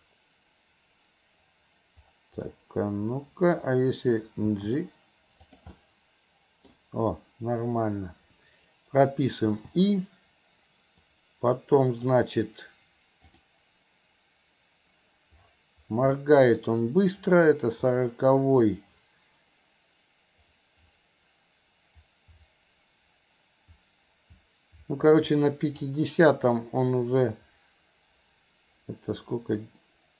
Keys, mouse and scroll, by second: 0.1-1.4 scroll down 1, 1.4-2.5 scroll down 1, 2.5-3.6 middle drag, 4.6 g, 5.8 middle click, 11.2 click, 13.4-16.3 drag, 16.3 middle click, 18.7-25.9 drag.